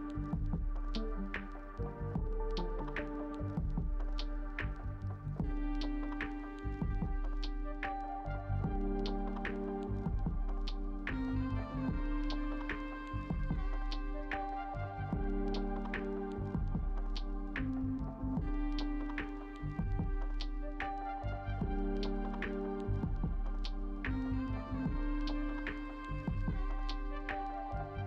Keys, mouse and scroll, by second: 6.2 ctrl+space, 17.0 ctrl+space.